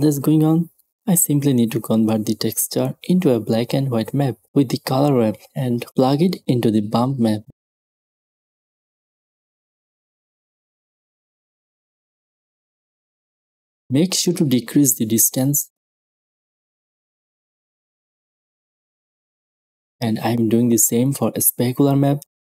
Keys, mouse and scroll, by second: 2.0 shift+a, 2.8-3.8 drag, 3.7-4.9 right drag, 4.9-7.6 drag, 7.7-10.6 drag, 11.5-13.1 drag, 11.5 right click, 15.8 click, 16.7 click, 17.9 click, 18.1 middle click, 19.1 click, 19.4 click, 20.0 click, 20.5 shift+d.